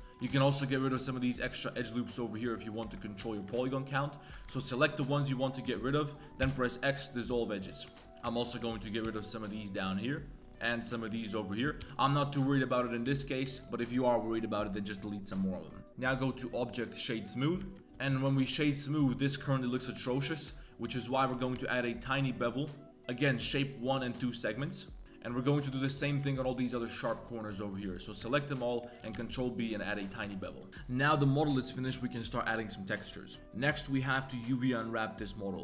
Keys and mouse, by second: 0.0 ctrl+z, 0.0 x, 0.1 alt+click, 0.4 alt+shift+click, 0.7 alt+shift+drag, 1.2 alt+shift+click, 2.0 alt+shift+click, 2.4 alt+shift+click, 3.2 shift+click, 3.6 alt+shift+click, 3.9 alt+shift+click, 4.6 shift+middle drag, 6.0 alt+shift+click, 6.4 x, 7.9 shift+middle drag, 8.0 2, 8.1 alt+click, 8.3 alt+shift+click, 8.7 shift+middle click, 9.0 x, 9.8 shift+drag, 10.4 2, 10.7 shift+drag, 11.5 alt+shift+click, 11.8 x, 12.4-13.0 drag, 13.2 drag, 13.2 2, 15.7 middle click, 15.8 Tab, 16.4-17.0 drag, 17.7 shift+drag, 17.8 Tab, 18.2 alt+click, 18.5 shift+click, 18.7 middle click, 19.9 middle click, 20.0 shift+drag, 20.5 shift+click, 20.9 2, 21.3 ctrl+b, 24.5 Tab, 24.6-25.0 drag, 25.0 2, 25.0 x, 25.1 click, 25.5 2, 25.7-26.1 alt+shift+drag, 26.5 alt+shift+click, 27.0 alt+shift+click, 27.3 middle click, 27.5 click, 28.2-28.6 shift+drag, 29.0 ctrl+b, 30.2 Tab, 30.6 drag, 31.5 middle click, 32.0 middle click, 32.3 middle click, 35.2 middle click.